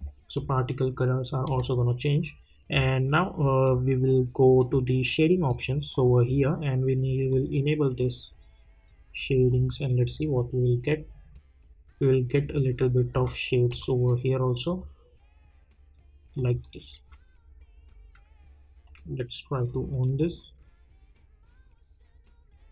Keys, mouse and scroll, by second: 0.3 `, 1.5 `, 2.7-3.6 scroll up 1, 3.6 click, 11.3-11.7 scroll up 1, 12.6-13.1 scroll down 1, 13.1 `, 13.8 `, 14.7 click.